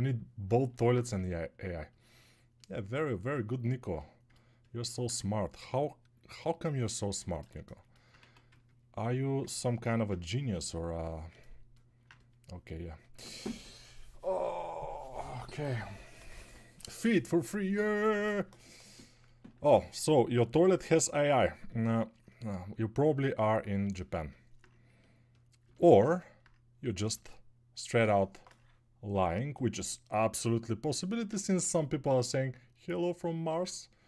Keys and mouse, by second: 8.5 1, 33.6 ctrl+space.